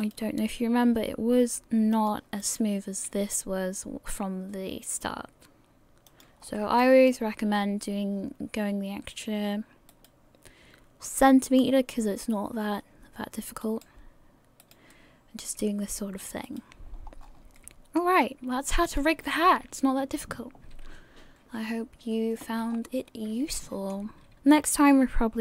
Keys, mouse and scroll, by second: 0.5 right click, 0.9 r, 3.2 right click, 6.4 scroll up 2, 6.8 shift+middle click, 7.5 scroll up 1, 9.5-9.8 scroll up 1, 10.7 right click, 11.1 r, 15.4 right click, 15.4 r, 16.9-17.4 scroll down 3, 17.2-17.7 scroll up 6, 17.7 middle click, 17.7 scroll down 3, 18.9 click, 19.5 scroll down 1, 23.3 scroll up 4, 23.6 shift+middle click, 24.3 a, 25.1 scroll up 2.